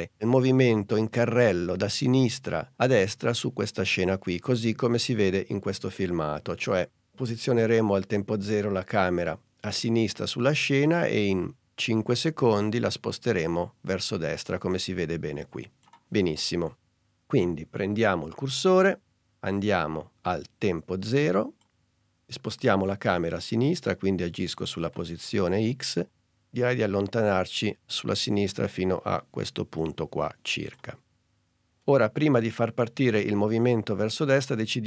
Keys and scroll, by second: 4.2 super+Tab.